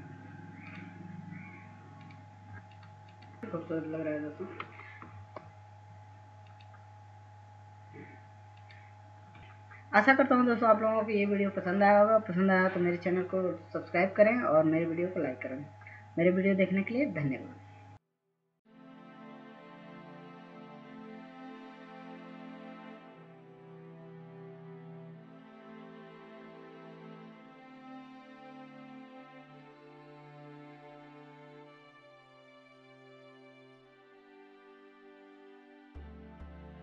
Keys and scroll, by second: 6.0 Down, 6.2 Down, 6.7 Down, 8.1 Up.